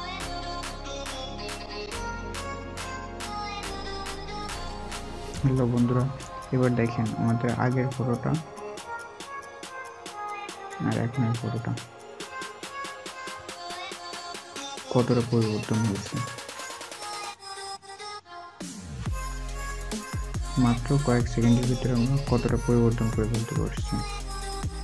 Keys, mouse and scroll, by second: 6.8 alt+scroll up 1, 7.7-9.8 scroll up 1, 14.1 alt+scroll, 14.1-14.7 alt+scroll down 1, 14.7-15.6 alt+scroll up 1, 15.7 alt+scroll up 1, 18.9-19.3 alt+scroll, 21.1 alt+click, 24.7 scroll up 1.